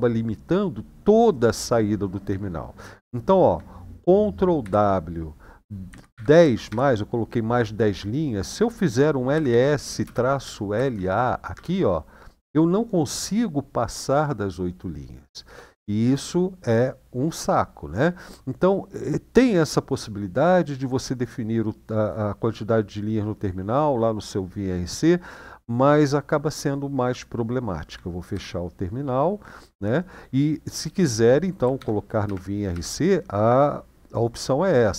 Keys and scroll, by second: 4.4 ctrl+w, 5.6-6.4 typing, 9.1-11.2 typing, 11.3 Return, 28.1 ctrl+d, 31.5 shift+;, 32.0 Up, 32.5 Up.